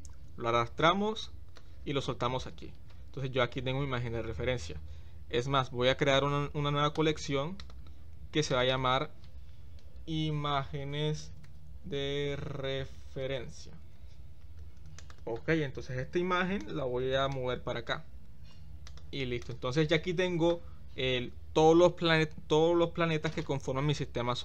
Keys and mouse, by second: 8.5 click, 8.7-15.2 drag, 17.3-17.9 drag.